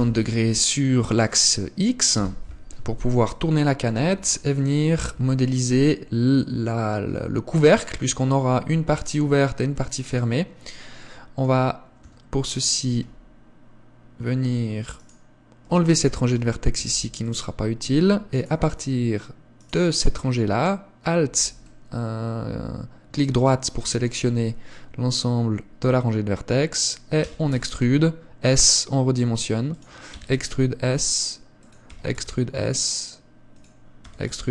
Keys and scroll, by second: 5.3 Tab, 12.2 a, 30.3 e, 32.2 e, 34.2 e.